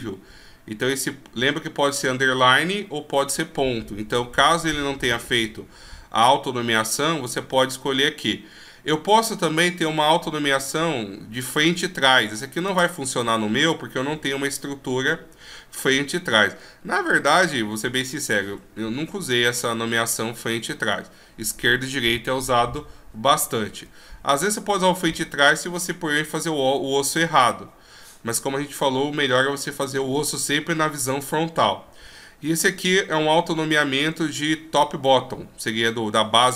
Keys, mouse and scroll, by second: 6.0-6.5 scroll up 1, 6.5 scroll down 1, 7.5 w, 23.9 w.